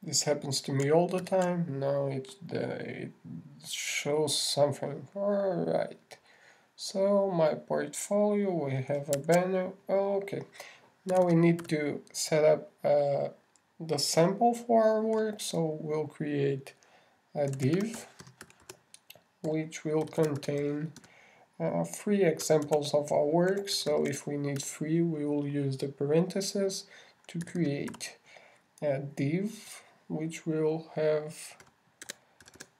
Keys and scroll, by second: 0.5 super+Tab, 2.6 super+r, 10.6 super+Tab, 24.0 shift+<, 25.1 shift+8, 25.8 shift+9, 26.0 shift+Left.